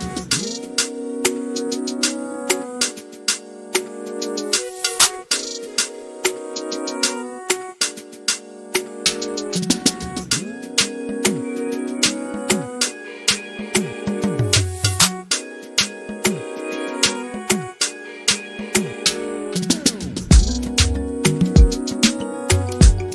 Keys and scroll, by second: 2.2-2.9 typing.